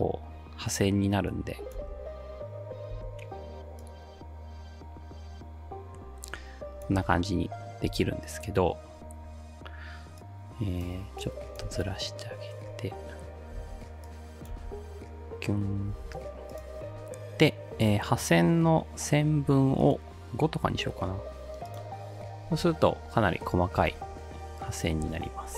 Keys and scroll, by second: 1.8 ctrl+alt+space, 3.0 space, 7.0 space, 7.9 space, 11.6 space, 13.6 space, 14.6 space, 15.9 space, 20.7 5, 20.9 Return, 23.8 space, 25.0 space.